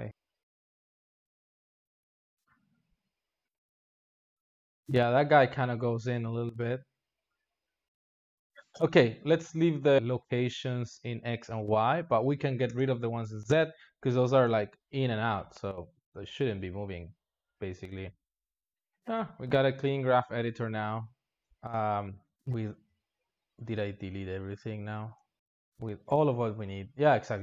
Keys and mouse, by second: 0.1 ctrl+z, 0.2-2.3 drag, 2.3 ctrl+z, 2.8-18.1 drag, 18.1 x, 18.7 alt+shift+z, 19.9 x, 22.2 alt+shift+z, 22.3 click, 23.6 shift+click.